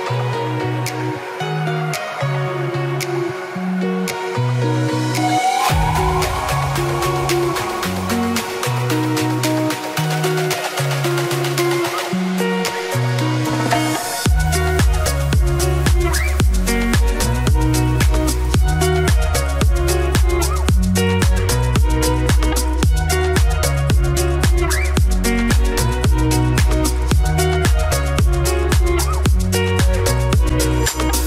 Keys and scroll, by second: 28.2 ctrl+t.